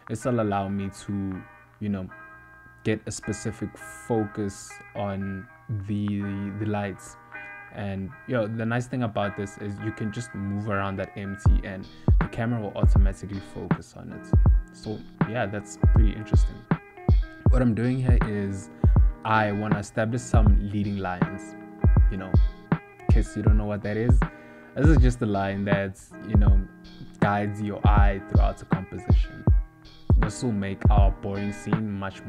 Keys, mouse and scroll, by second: 0.2 middle click, 1.4 middle click, 2.5 middle click, 2.5 scroll up 1, 8.0 shift+middle click, 8.6 shift+d, 10.6 ctrl+middle click, 11.1 shift+middle click, 12.6 shift+d, 15.0 shift+d, 16.7 shift+middle click, 17.3 ctrl+middle click, 18.2 shift+middle click, 18.9 shift+d, 22.7 click, 23.8 g, 25.3 click, 26.6 z, 30.7 shift+d.